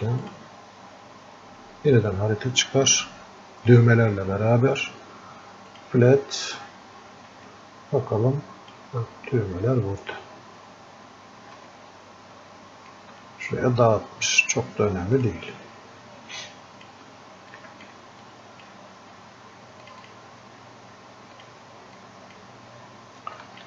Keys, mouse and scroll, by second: 7.6-18.5 alt+drag, 11.9-13.1 alt+drag, 16.7 click, 18.5-23.6 drag.